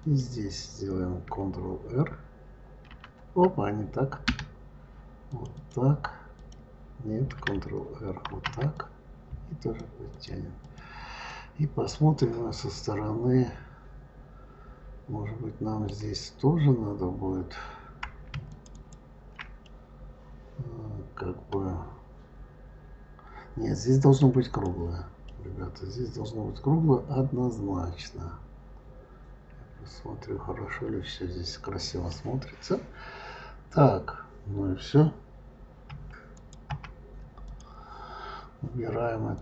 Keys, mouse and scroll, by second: 2.7 ctrl+r, 5.1 click, 5.4 click, 6.2 click, 8.1 ctrl+r, 10.5 click, 11.1-14.1 middle drag, 18.3 shift+click, 18.6 shift+click, 19.5-22.6 middle drag, 24.3 click, 25.1-28.1 middle drag, 32.2-32.5 scroll down 2, 35.7 KP_Divide, 36.2 click, 36.5 KP_Divide, 37.3 click, 39.2 click.